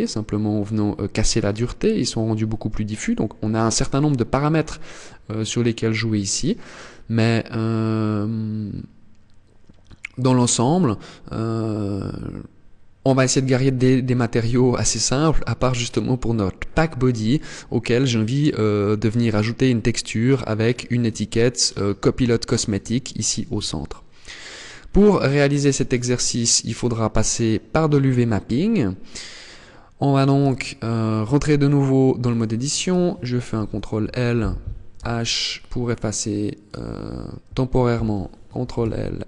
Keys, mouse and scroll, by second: 2.1 click, 5.7 scroll down 1, 6.4 scroll down 1, 8.0 scroll up 1, 8.7 scroll up 1, 14.0 click, 14.9 click, 24.4 click, 27.7 middle click, 30.0 Tab, 30.8-31.5 scroll up 1, 31.8 right click, 33.1 ctrl+l, 34.5 h, 36.2 right click, 38.1 ctrl+l, 38.7 h.